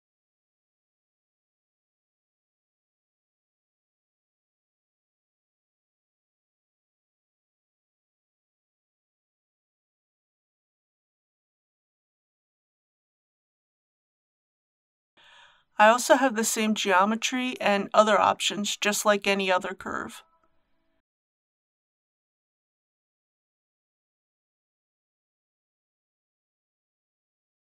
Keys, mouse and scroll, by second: 3.7 g, 5.4 click, 6.9 g, 8.1 click, 16.8 click, 17.8 scroll down 1, 18.7 click, 19.3 scroll down 1, 24.2-26.8 drag, 26.8-27.6 middle drag.